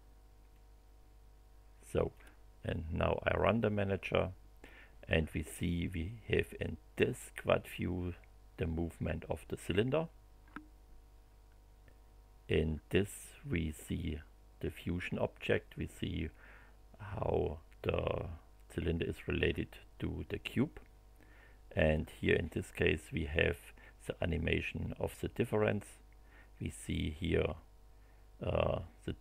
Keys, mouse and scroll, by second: 0.5-2.3 drag, 3.3 click.